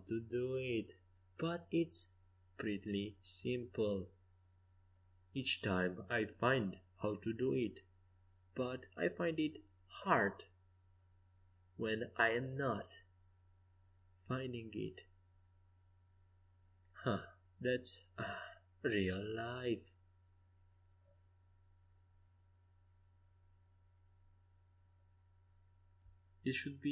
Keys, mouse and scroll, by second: 4.7-10.9 middle drag, 10.9-26.9 drag.